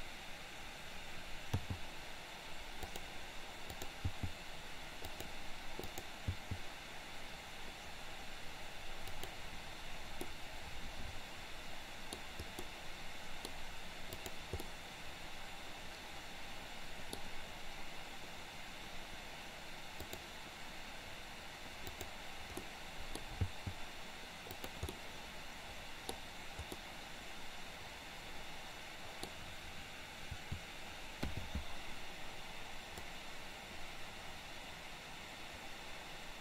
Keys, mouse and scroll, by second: 1.5 g, 3.8 click, 4.0 g, 5.8 click, 10.3-12.2 middle drag, 12.5-13.5 middle drag, 14.2 click, 14.7-17.2 middle drag, 20.0 click, 21.9 click, 22.7-23.2 middle drag, 23.5 g, 24.9-26.0 middle drag, 26.8-28.2 scroll up 1, 28.2-29.3 scroll up 1, 30.4 a, 31.3 i, 33.2-36.4 drag.